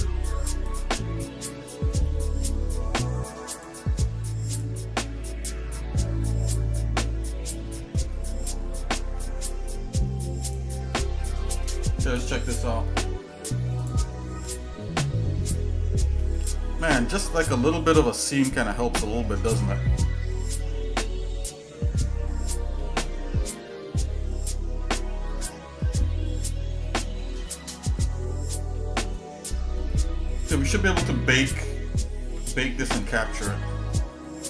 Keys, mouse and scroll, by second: 2.0 shift+middle click, 3.5 click, 4.7 click, 5.5-7.7 shift+middle drag, 8.1 middle click, 8.6 scroll down 2, 9.2 shift+middle click, 9.9-10.2 scroll up 2, 10.4 click, 10.9 shift+middle click, 14.2 click, 15.5 shift+middle click, 16.3 middle click, 17.1 scroll up 1, 18.0 middle click, 22.5 shift+middle click, 25.4 shift+middle click, 26.8 shift+middle click, 27.6 middle click, 29.3 scroll down 1, 29.9 shift+middle click, 33.0 shift+middle click, 33.4 middle click, 34.0 scroll down 3, 34.1 scroll up 1.